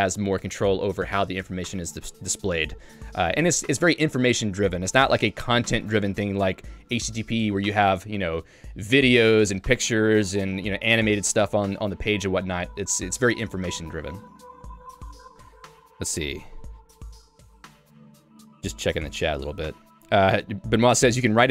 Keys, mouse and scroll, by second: 15.1 click, 15.3 Escape.